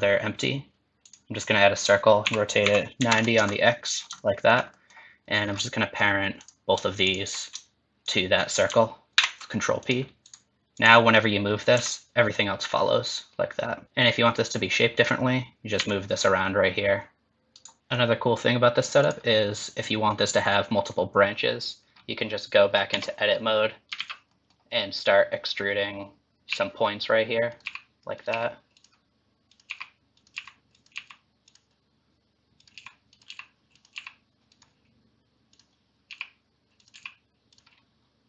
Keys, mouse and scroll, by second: 2.2 r, 3.8 scroll up 3, 4.2 shift+middle click, 4.8 middle click, 5.5-6.4 scroll down 4, 6.4 click, 7.1 shift+click, 8.0 click, 9.1 ctrl+p, 10.3 click, 10.8 click, 11.7 g, 13.8 shift+middle click, 13.8 scroll up 2, 14.9 click, 15.8 g, 17.8 scroll down 1, 19.1 click, 22.9 Tab, 23.3-23.9 scroll up 2, 24.0 alt+z, 24.3 middle click, 25.5 click, 26.5 e, 27.6 e, 28.5 e, 29.5 click, 29.7 e, 30.4 e, 30.9 e, 32.6 click, 32.8 e, 33.4 e, 34.1 e, 35.5 click, 36.1 e, 37.0 e.